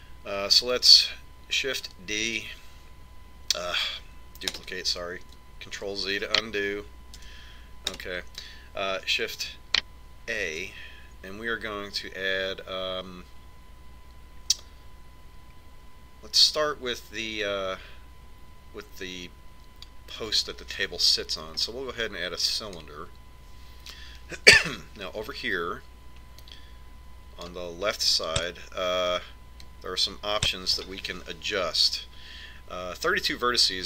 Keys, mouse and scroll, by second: 3.9 shift+d, 7.6 ctrl+z, 8.9 g, 12.1 shift+a, 28.3 click, 30.3 click.